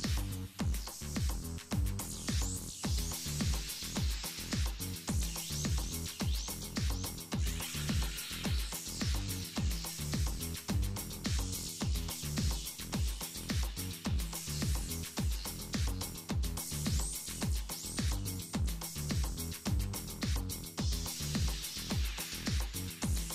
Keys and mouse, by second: 0.1 middle click, 1.0 middle click, 1.2 Tab, 2.1 Tab, 3.1 KP_Decimal, 3.6 ctrl+z, 4.0 ctrl+z, 4.3 ctrl+z, 5.4 z, 5.8 z, 6.4 Tab, 6.4 alt+f, 6.5 Tab, 8.1 ctrl+b, 10.4 Tab, 11.9 KP_7, 13.1 Tab, 13.8 Tab, 14.9-15.5 drag, 16.0 KP_7, 17.1 Tab, 17.6 z, 17.9 ctrl+Tab, 18.6-19.9 right drag, 19.2 a, 19.3 a, 20.3 s, 22.2 KP_1, 23.0 s.